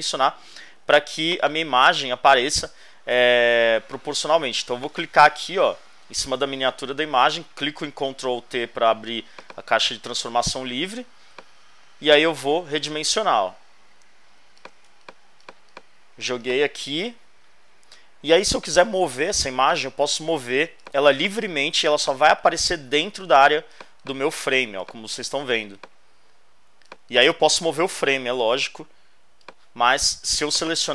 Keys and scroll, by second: 7.5 super+t, 14.9 alt+shift+space, 15.8 space, 17.0 Return.